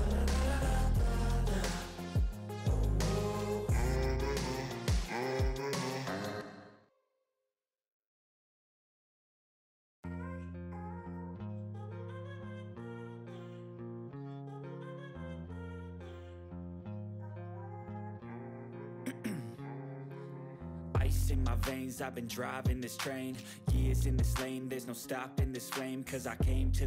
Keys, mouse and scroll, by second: 1.8 click, 5.4 click, 5.6-6.5 typing, 6.7-7.3 scroll down 1, 9.3-11.0 drag, 13.7-14.1 middle click, 14.2-14.6 ctrl+scroll up 2, 14.6 click, 17.2-19.9 drag.